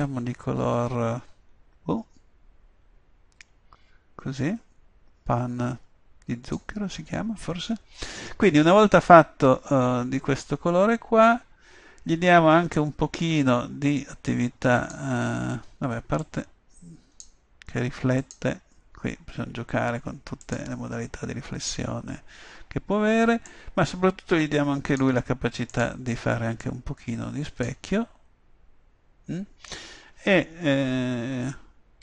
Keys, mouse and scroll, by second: 12.9-14.6 drag, 16.3-18.0 drag, 18.3-19.9 drag, 23.6-28.4 drag.